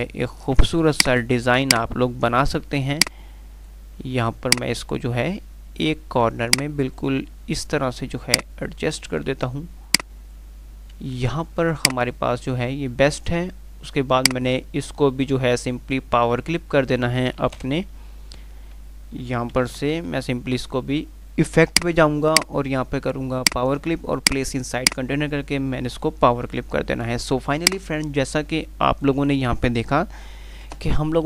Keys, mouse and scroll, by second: 1.4-3.2 drag, 17.6 typing, 19.6-20.5 typing, 21.9 click, 26.2 F3, 30.9 F9.